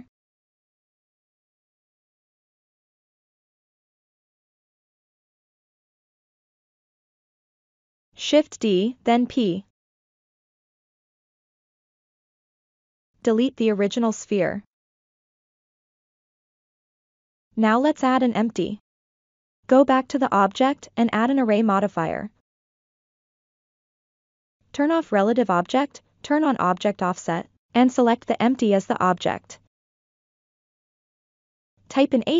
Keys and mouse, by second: 1.3-2.5 shift+drag, 3.5 shift+click, 4.2-6.0 middle drag, 6.2 ctrl+middle click, 6.7 shift+middle click, 8.0 shift+d, 9.4 p, 10.9 Tab, 12.8 x, 14.2 click, 14.6-15.7 middle drag, 16.4 shift+a, 19.5 ctrl+middle drag, 24.5 click, 25.6 click, 27.1 click, 30.4-31.9 drag.